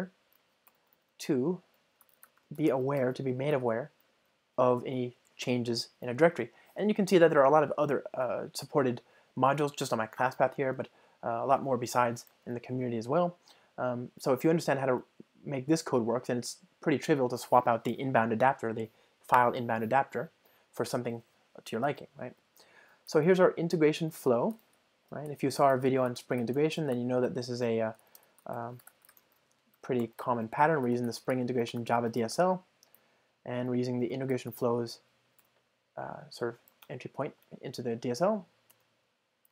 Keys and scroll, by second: 1.3 Return, 16.5 super+BackSpace, 24.2 Return, 30.5 Return, 36.8 Return, 37.4 alt+Return.